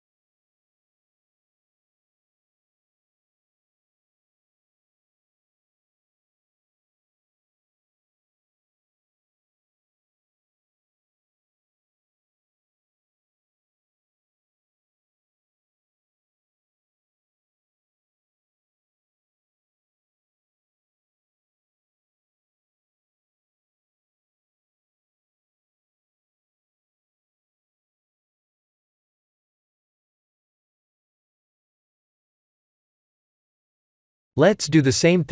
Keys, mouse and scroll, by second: 0.2 click, 0.8 shift+click, 1.4 ctrl+e, 3.9 middle click, 4.7 shift+middle click, 5.3 middle click, 7.2 alt+click, 8.1 f, 8.7 middle click, 9.4-9.9 scroll down 3, 9.7 middle click, 10.1 Tab, 10.4 middle click, 14.0 KP_1, 14.2 KP_1, 15.2 alt+h, 16.2 click, 16.5 middle click, 18.2-19.1 scroll down 4, 18.6 middle click, 19.7 scroll down 2, 20.3 middle click, 23.4 click, 23.8 Tab, 24.2 scroll up 1, 24.7 shift+middle click, 24.7 scroll up 3, 25.2-25.9 scroll up 2, 25.9 middle click, 27.6 ctrl+r, 30.9 middle click, 32.1 3, 32.5 click, 34.1 ctrl+click.